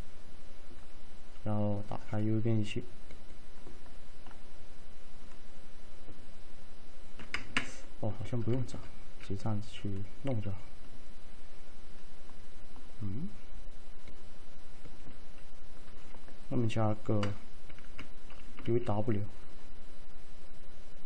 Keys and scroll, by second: 7.4 Caps_Lock, 17.9 Caps_Lock, 18.7 alt+`.